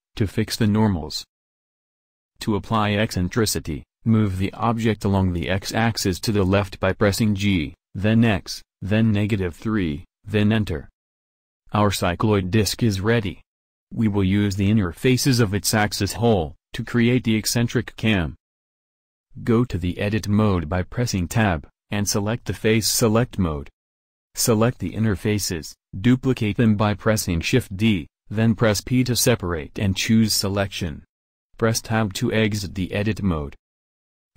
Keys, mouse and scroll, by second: 0.4 Tab, 1.9 KP_1, 2.1 KP_7, 5.3 g, 20.0 Tab, 21.1 click, 24.7 a, 26.2 shift+d, 27.1 p, 34.0 Tab.